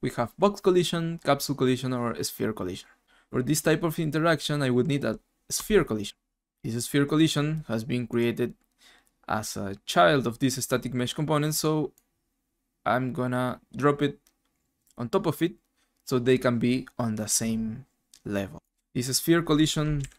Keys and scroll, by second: 20.0 Right.